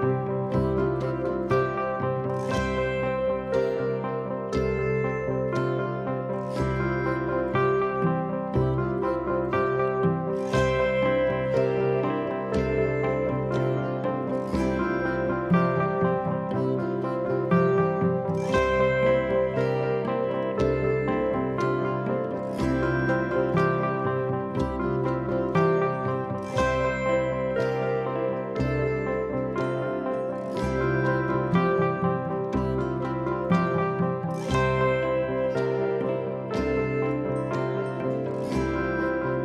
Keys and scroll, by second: 11.0 4, 11.8 shift+i, 15.8-16.7 typing, 20.3 4, 21.1 3, 24.1 4, 26.2 3, 26.6 4, 28.4 3, 30.0 ctrl+d, 30.1 Escape, 31.2 Escape.